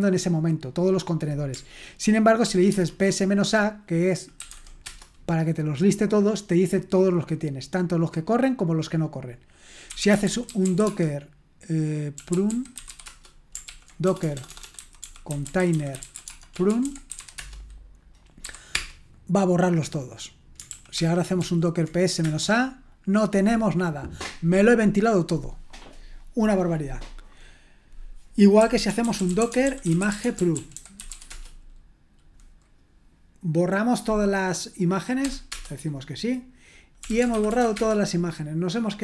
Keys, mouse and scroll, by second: 2.5 ctrl+p, 2.7 space, 4.2-4.9 typing, 9.6-18.7 typing, 13.6 ctrl+p, 20.7 ctrl+p, 21.0 ctrl+p, 21.4 ctrl+p, 22.2 Return, 28.3-31.6 typing, 35.2 typing, 36.8-39.0 typing.